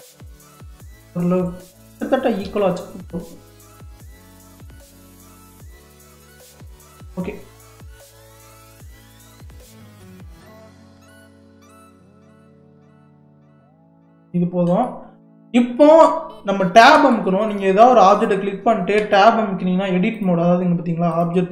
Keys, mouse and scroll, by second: 2.5 g, 7.7 click, 8.2 click, 9.5 g, 13.6 click, 14.3-16.9 shift+middle drag, 16.9 Tab, 18.2 click, 19.0 Tab, 20.2-21.5 drag.